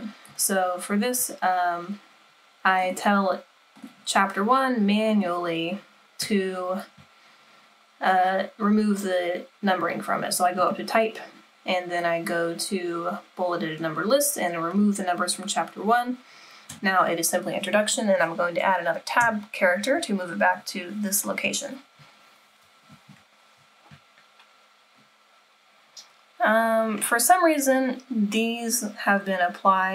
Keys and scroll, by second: 19.2 Tab.